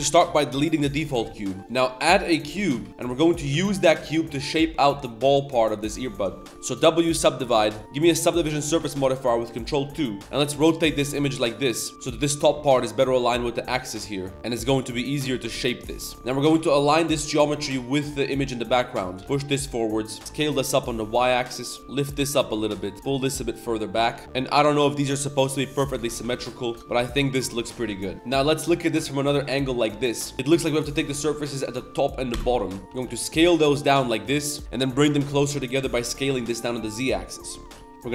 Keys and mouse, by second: 1.6 shift+a, 3.1 Tab, 3.2 Tab, 3.5 g, 4.4 z, 6.3 g, 6.5 Tab, 6.5 w, 7.5 Tab, 7.8 ctrl+2, 7.8 z, 10.2 Tab, 10.2 r, 11.3 g, 13.5-16.1 typing, 15.3 Tab, 18.7 Tab, 19.0 typing, 24.2 Tab, 25.7 Tab, 26.1 a, 26.3 b, 26.7 g, 26.8 z, 30.4 click, 30.7-31.1 middle drag, 31.5 shift+middle click, 32.3 ctrl+KP_Add, 32.9 s, 37.5 Tab, 37.6 middle drag, 37.9 shift+click, 37.9 1.